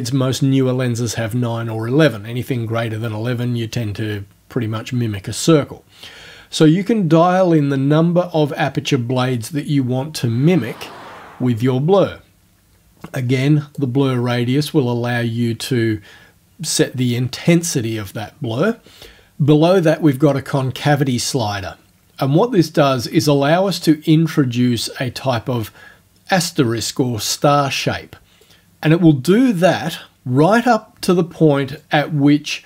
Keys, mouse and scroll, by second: 6.7-11.8 drag, 13.8-17.0 drag, 22.4-28.4 drag, 31.8-32.6 drag.